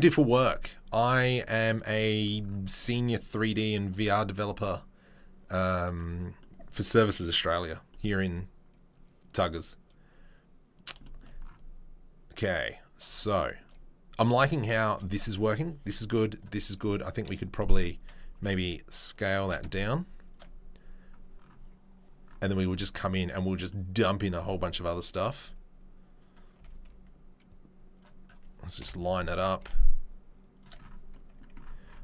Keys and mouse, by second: 15.2 click, 15.3-25.1 middle drag, 18.4 s, 19.4 g, 25.1-26.2 drag, 26.2-32.0 middle drag, 28.8 KP_7, 29.6 g.